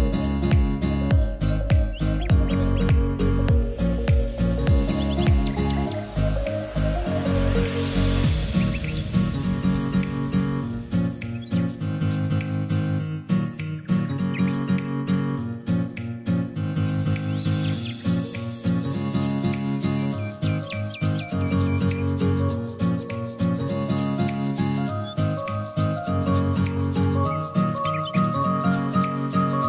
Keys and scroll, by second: 6.8 0, 7.5 1, 7.8 Return, 9.9 0, 10.9 Return, 12.3-13.3 typing, 20.7 t, 26.4-27.6 typing.